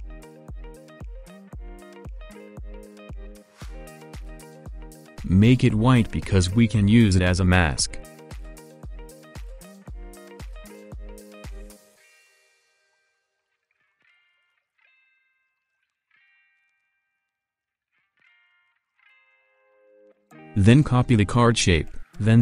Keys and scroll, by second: 12.0 ctrl+z.